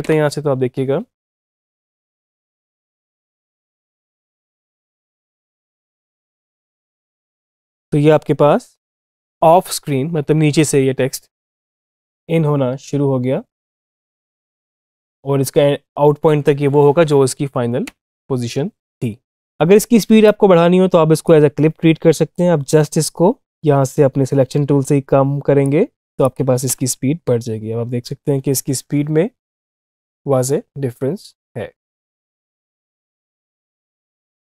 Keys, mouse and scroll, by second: 3.3 =, 17.6 space, 20.1-26.1 drag, 26.5 space, 32.7 space.